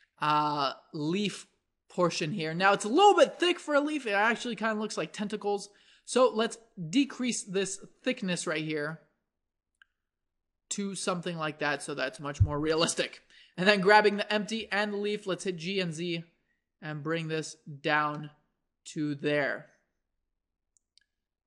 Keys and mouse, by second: 6.3-13.8 drag, 13.8-15.8 middle drag, 14.4 g, 18.2-20.1 middle drag.